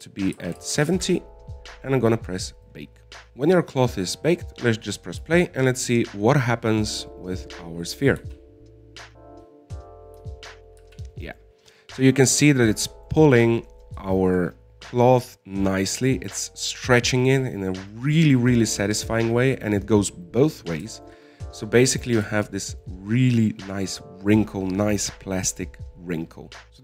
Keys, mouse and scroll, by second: 9.5 alt+a, 12.2 alt+a, 12.4 middle click, 12.9-13.3 scroll up 3, 13.3-21.0 middle drag, 21.0-21.3 scroll down 4, 21.3-23.3 middle drag, 23.3-23.7 scroll up 2, 23.7 shift+middle click, 24.4-26.4 scroll up 2.